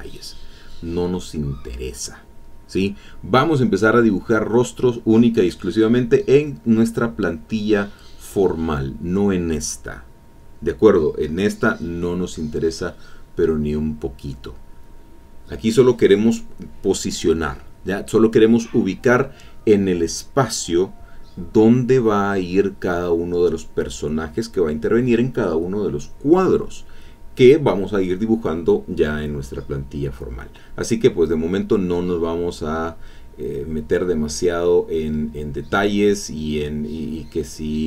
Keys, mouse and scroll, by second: 1.0-2.3 drag, 2.4-3.5 drag, 4.0-5.2 drag, 5.9 e, 6.0 click, 7.1 e, 7.3-8.3 drag, 12.0 click, 12.3-15.3 drag, 15.7-16.9 drag, 17.2 click, 18.9-22.9 drag, 25.0-27.5 drag, 27.6 click, 29.3-32.7 drag, 33.2 e, 33.3-36.6 drag, 33.9 e, 36.7-37.8 drag.